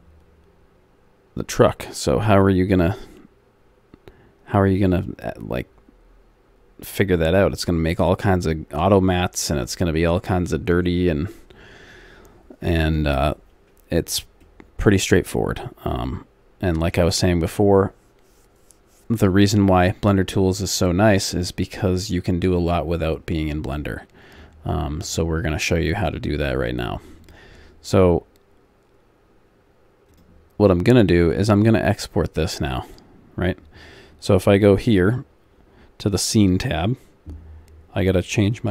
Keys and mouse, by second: 11.6 middle click, 14.5-16.3 middle drag, 20.1-22.6 middle drag, 23.3-25.8 middle drag, 26.0-31.3 drag, 31.3-34.9 middle drag, 34.9-38.7 drag.